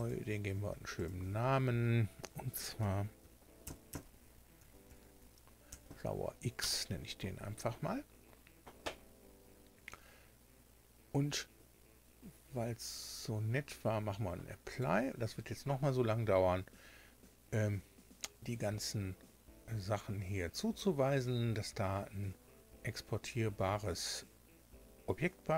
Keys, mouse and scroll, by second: 0.9 click, 3.1-6.1 typing, 6.5 Return, 12.8 click, 14.6 click.